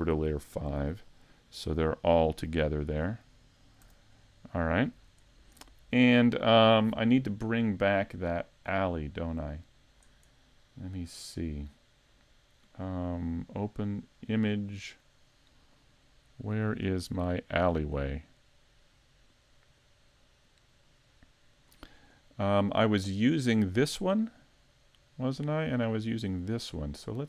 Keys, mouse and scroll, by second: 0.1 m, 2.8 click, 3.3 scroll up 2, 3.8 a, 4.2 middle click, 5.3 shift+middle click, 9.4 click, 11.7 click.